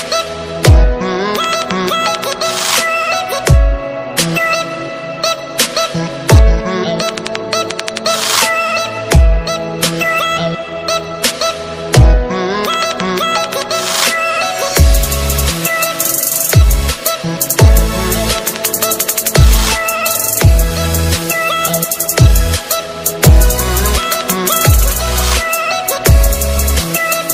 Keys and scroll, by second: 2.3 ctrl+alt+z, 15.1 alt+space.